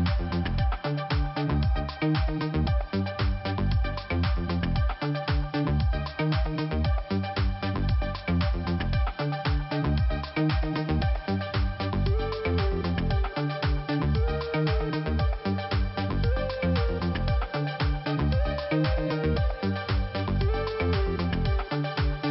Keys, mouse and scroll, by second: 0.6 click, 2.9 click, 4.7 click, 6.7 click, 8.6 click, 11.2 click, 12.1 click, 13.2 click, 14.9 click, 15.0 click, 15.9 click, 18.4 click, 20.4 click, 20.5 click, 21.3 click.